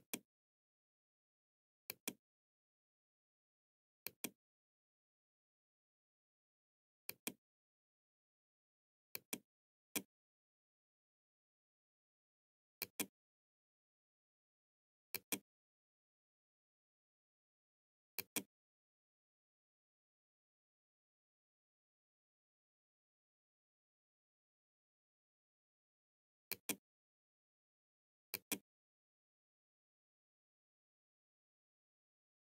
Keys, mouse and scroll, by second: 1.0 click, 3.1 click, 5.9-7.1 drag, 8.1 click, 11.9 click, 14.2 click, 17.1 click, 25.6 click, 27.0-28.1 drag.